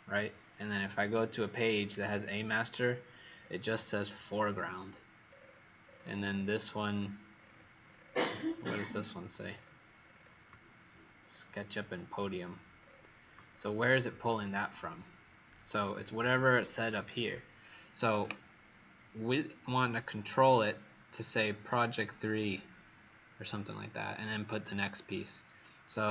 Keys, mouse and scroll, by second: 1.7 click, 3.6-5.2 alt+scroll down 2, 5.2 scroll down 6, 5.8-11.1 scroll down 74, 11.1 scroll down 2, 12.7-13.4 scroll up 7, 13.4-14.1 alt+scroll down 2.